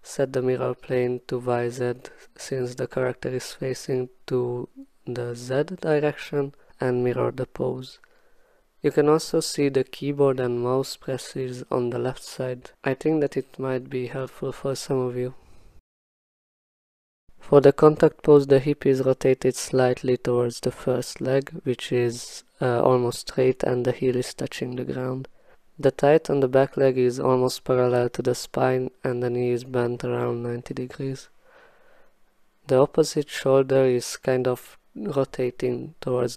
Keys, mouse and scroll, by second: 5.8 click, 8.3 click, 12.6 click, 13.0 f, 15.6-16.7 typing, 16.6 click, 16.7 ctrl+z, 17.1 ctrl+z, 17.6 click, 17.9 1, 18.2 click, 19.1 click, 19.6 w, 19.8 click, 20.6 click, 20.9 click, 21.1 click, 21.1 click, 21.3 click, 21.6 click, 21.8 click, 21.9 click, 22.2 click, 22.4 e, 22.7 click, 22.8 click, 22.9 w, 23.3 click, 23.6 click, 23.9 click, 24.6 click, 24.7 click, 25.2 1, 25.8 click, 26.5 click, 26.6 click, 26.7 click, 26.9 click, 27.1 click, 27.1 e, 27.7 click, 28.1 click, 28.6 click, 30.5 click, 31.1 click, 31.4 click, 31.5 click, 31.7 click, 32.2 click, 32.4 click, 33.1 click, 33.8 click, 34.5 click, 34.6 click, 34.8 click, 34.9 w, 35.2 right click, 35.6 right click, 35.9 right click, 36.2 shift+right click.